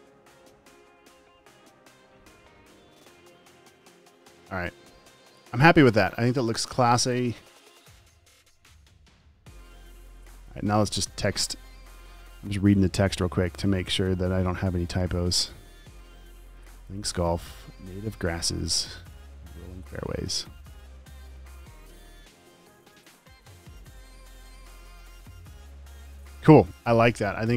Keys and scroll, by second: 8.3 super+s.